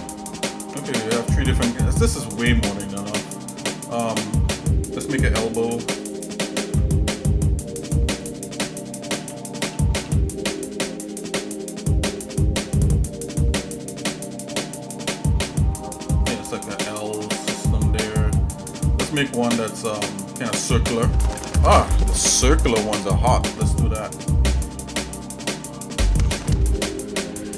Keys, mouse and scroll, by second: 5.7 ctrl+r, 6.5 ctrl+Tab, 8.2 click, 9.2 e, 15.7 middle click, 25.2 click, 26.2 ctrl+z.